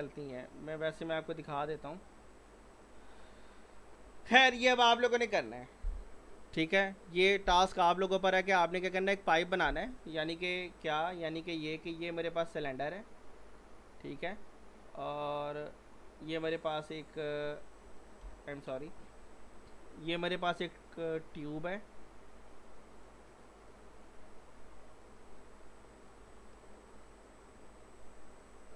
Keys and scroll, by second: 1.8 ctrl+z, 14.9 w, 18.2 Delete.